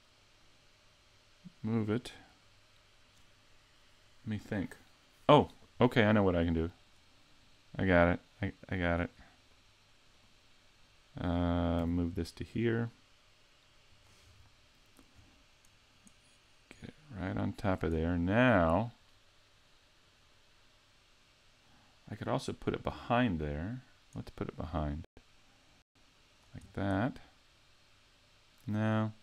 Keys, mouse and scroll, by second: 2.0 click, 6.9 right click, 7.9 click, 9.6 right click, 10.2 right click, 11.8 g, 14.0 click, 14.3-15.0 scroll up 4, 15.2-16.7 scroll up 3, 16.7 click, 18.0-18.4 scroll down 4, 23.8-24.9 scroll up 1, 24.9 click, 27.0 middle click.